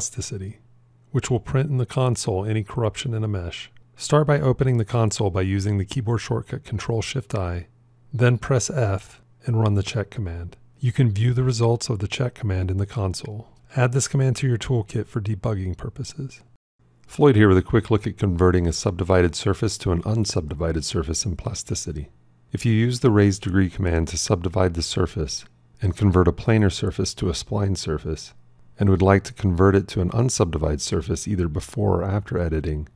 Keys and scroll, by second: 4.3 ctrl+shift+i, 8.9 f, 23.8 shift+s.